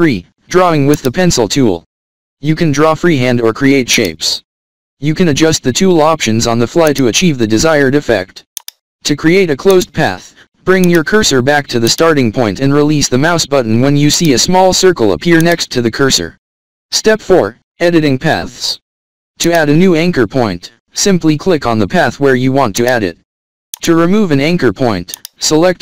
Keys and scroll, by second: 8.1 v, 16.4 alt+scroll up 1, 17.3 alt+scroll up 1, 19.9 alt+scroll down 1, 20.7 alt+scroll up 1, 21.9 =.